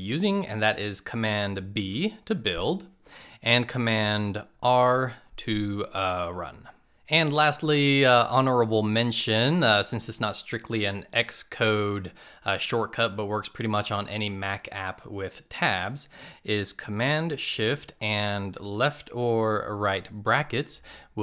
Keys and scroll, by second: 0.5 super+b, 3.8 super+r.